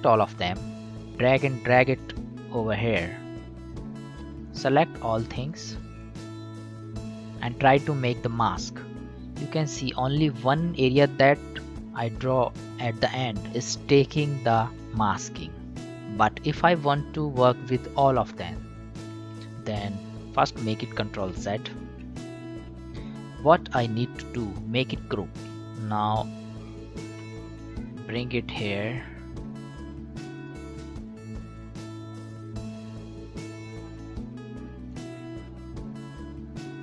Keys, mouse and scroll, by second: 1.0-2.9 drag, 4.1 ctrl+z, 4.5-8.3 drag, 8.4 click, 20.6 ctrl+z, 23.1-33.3 drag, 33.3-36.8 drag.